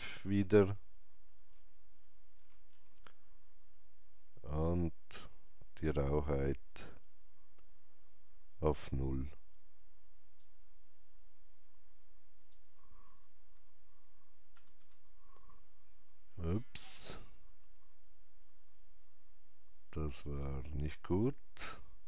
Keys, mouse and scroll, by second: 1.3 click, 1.3 scroll down 1, 1.9 scroll up 1, 6.3-14.5 drag, 6.3 scroll up 1, 14.5 KP_0, 14.7 KP_Enter, 15.9 KP_0, 15.9 KP_Decimal, 20.8 KP_Enter, 20.8-22.0 drag, 20.8 KP_0.